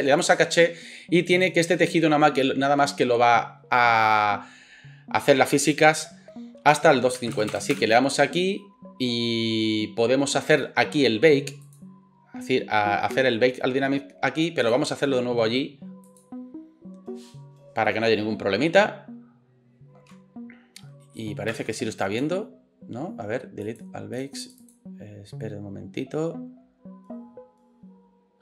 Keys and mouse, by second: 0.2-14.7 drag, 7.5 KP_0, 14.7-16.1 middle drag, 16.1-28.4 drag.